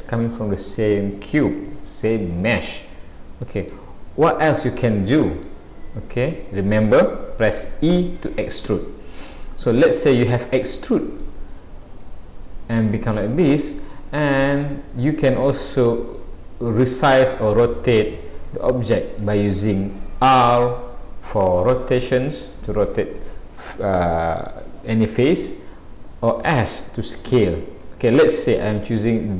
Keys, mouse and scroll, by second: 2.9 middle click, 5.0 middle click, 6.2 click, 7.5 middle click, 8.5 middle click, 12.0 middle click, 14.3-14.9 scroll up 1, 15.4 middle click, 16.8-17.1 scroll down 2, 17.8 scroll down 1, 18.5 scroll up 1, 18.7 shift+middle click, 27.7 click, 29.1 middle click.